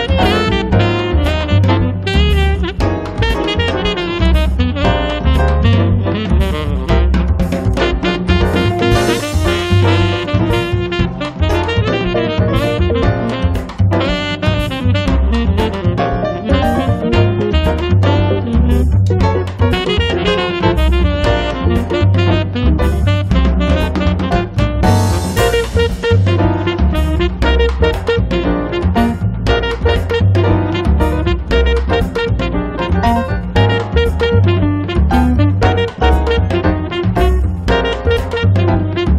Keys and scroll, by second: 0.0 l, 5.1 p, 6.4 1, 6.7 0, 6.9 Return, 7.7 space, 8.0 l, 33.3 p, 35.6 e.